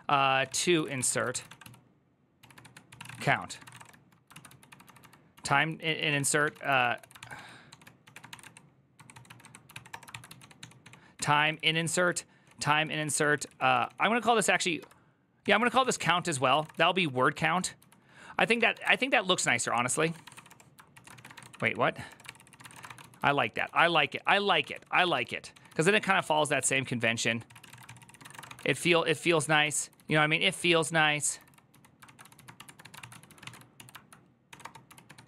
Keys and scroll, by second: 0.0-35.2 typing, 16.0 ctrl+c, 20.7 ctrl+c, 21.8 Return, 22.0 ctrl+c.